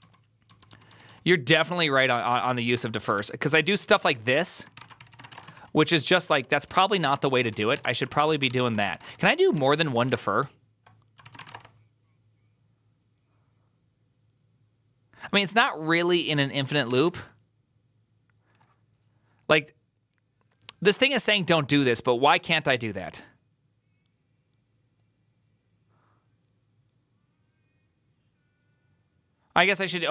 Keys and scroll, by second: 0.0-9.9 typing, 10.0 Return, 11.1 ctrl+c, 11.2 typing, 11.4 Return, 29.9-30.1 typing.